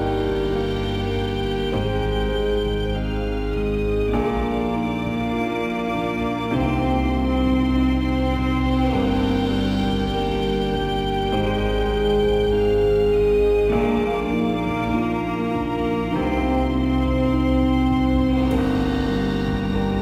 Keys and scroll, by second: 6.5 ctrl+t, 19.4 ctrl+0.